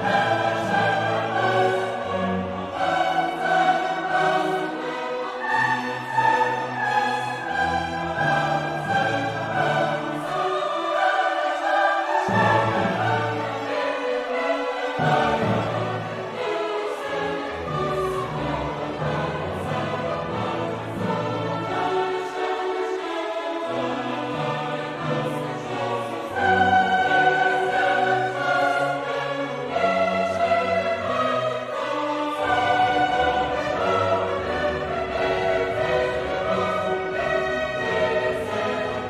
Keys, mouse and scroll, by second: 0.6 click, 1.7 click, 3.0 click, 4.7 click, 6.1 right click, 7.0 click, 7.8 click, 8.5 click, 11.7 click, 13.5 click, 14.8 right click, 18.1 click, 21.8 click, 23.2 click, 24.4 click, 26.0 middle click, 26.9 click, 28.0 click, 29.0 click, 32.6 click, 35.8 click, 37.7 click.